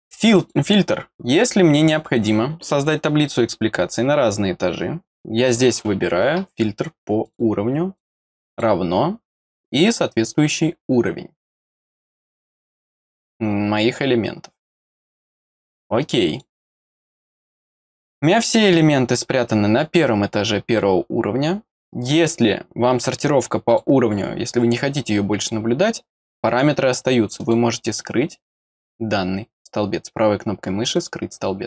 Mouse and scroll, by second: 0.3 click, 7.2 click, 7.9 click, 8.5 click, 16.3 click, 23.6 click, 27.3 right click, 30.9 click.